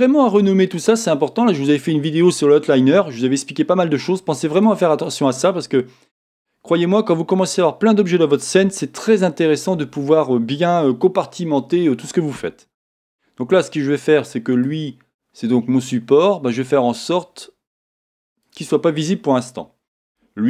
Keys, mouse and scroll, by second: 0.4 Return, 6.0-6.7 scroll down 1, 6.7-14.5 middle drag, 14.5 click, 18.3 click, 19.4 click.